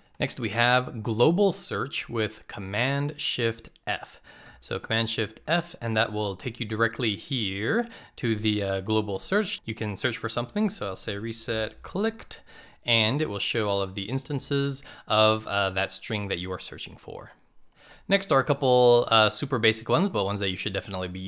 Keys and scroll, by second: 0.9 shift+super+f.